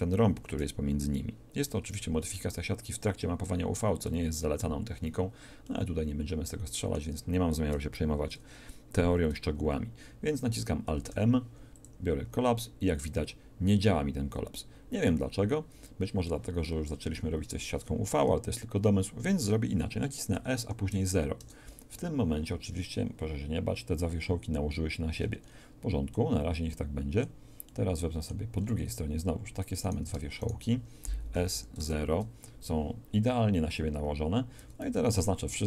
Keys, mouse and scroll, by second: 5.6 middle click, 10.9 alt+m, 20.3 s, 25.1 middle click, 29.8 right click, 31.3 shift+s, 31.8 click, 34.6 a, 34.8 a, 35.4 w.